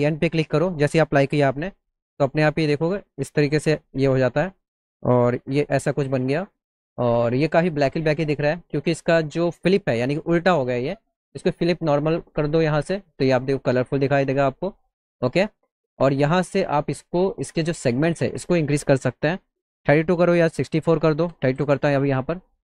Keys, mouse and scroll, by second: 2.1 click, 3.4 middle click, 4.0 middle click, 4.5 alt+middle click, 12.6 click, 15.2 middle click, 18.3 click.